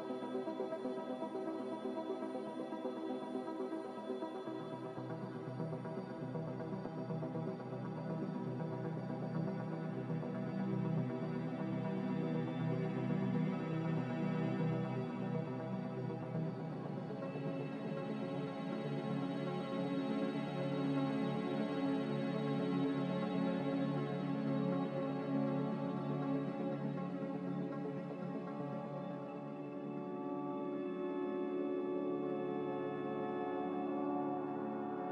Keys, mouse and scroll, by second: 0.3 z, 1.5 z, 10.4 3, 10.8 0, 11.2 Escape, 11.4 Escape, 15.8-16.6 typing, 25.1 Delete.